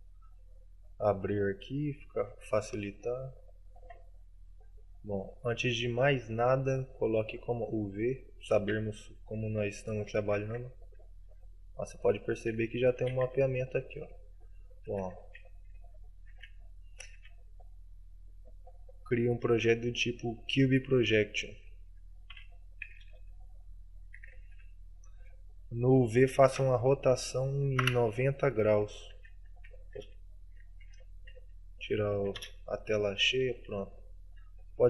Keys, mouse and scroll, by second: 16.5 Tab.